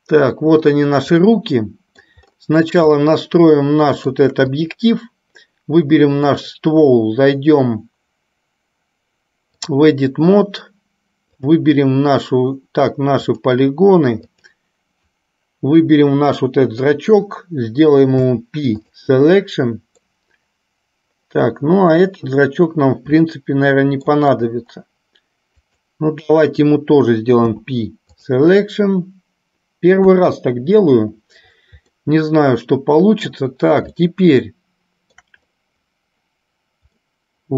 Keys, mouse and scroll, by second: 1.6 middle click, 3.2-4.3 shift+middle drag, 4.7 click, 6.4-10.8 drag, 11.6 click, 13.3 click, 14.6 click, 18.3 p, 20.4-22.3 middle drag, 23.7 shift+middle click, 25.9 click, 27.6 p, 30.2 KP_1, 32.2-33.7 middle drag, 34.2-35.4 shift+middle drag, 37.2-37.5 middle drag.